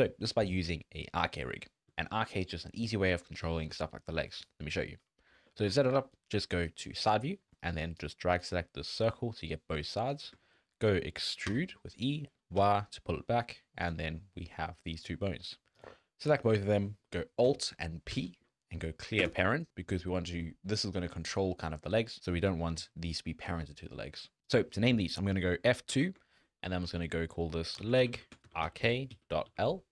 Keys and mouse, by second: 1.2 drag, 1.9 drag, 2.3 drag, 3.5 shift+drag, 4.0 drag, 4.7 shift+drag, 5.3 Tab, 5.6 alt+a, 5.8 1, 6.2 click, 7.0 click, 8.1 click, 9.1 click, 10.4 shift+drag, 11.0 shift+drag, 11.5 e, 14.1 click, 18.1 alt+p, 25.9 F2.